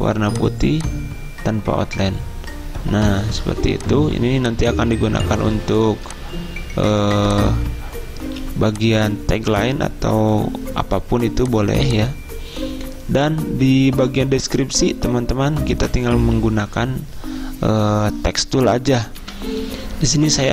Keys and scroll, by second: 8.3 z, 19.4 F10.